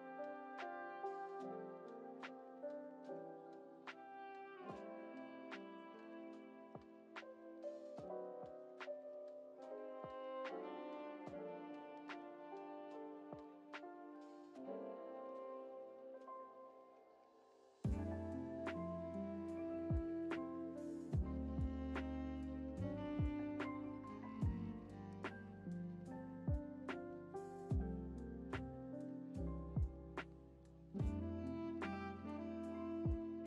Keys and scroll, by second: 1.1 s, 13.4 ctrl+z, 22.6-23.4 typing.